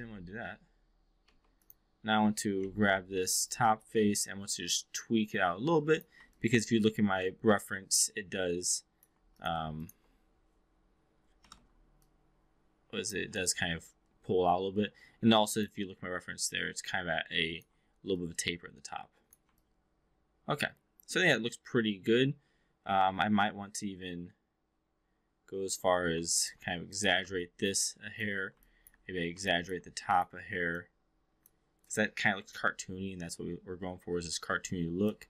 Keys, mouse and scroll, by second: 0.1 3, 1.1 q, 1.4 click, 2.5 x, 3.1 w, 3.7-6.0 drag, 6.3-9.1 alt+drag, 9.3 click, 9.7 shift+click, 11.3 e, 11.5 r, 11.9-13.1 drag, 13.3-15.7 alt+drag, 16.9 alt+click, 18.1-19.4 drag, 19.6-25.9 alt+drag, 26.3 alt+click, 26.9 click, 27.1 e, 27.2 r, 27.7-28.2 drag, 28.5-28.9 drag, 29.5 drag, 30.1 click, 30.7-31.5 drag, 31.7 click, 32.5-33.3 alt+drag, 34.3 alt+middle click, 34.7-35.1 alt+drag.